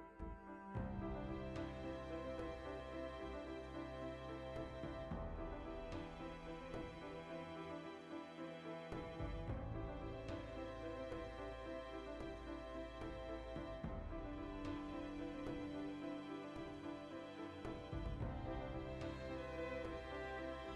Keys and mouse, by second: 0.5 ctrl+b, 2.2 right click, 3.6 ctrl+r, 5.7 alt+right click, 6.0-9.0 shift+middle drag, 8.3 3, 9.0 alt+right click, 9.6 ctrl+z, 10.6 shift+middle click, 11.5 ctrl+z, 11.8-13.2 middle drag, 13.2 ctrl+b, 15.4-20.7 middle drag.